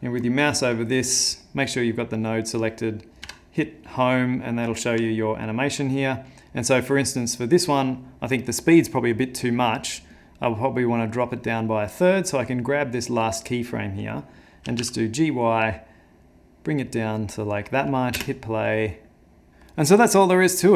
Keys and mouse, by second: 1.4 middle click, 1.9 click, 2.0 click, 3.2 Home, 4.7 middle click, 5.1 ctrl+middle click, 7.5 click, 10.2 click, 12.4 click, 14.7 g, 18.2 space.